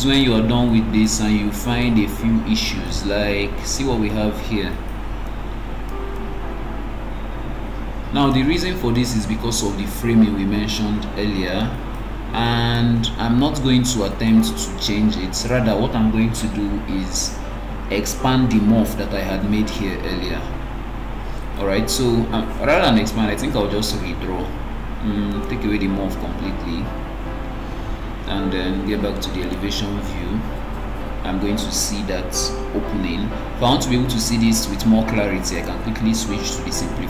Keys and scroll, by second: 22.4 Escape, 27.6 BackSpace.